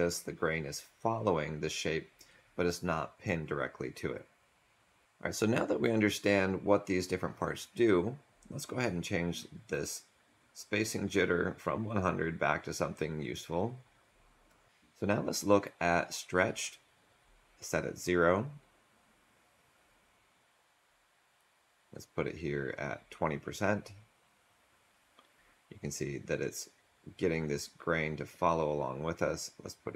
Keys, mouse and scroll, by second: 5.0 Delete, 18.5 click.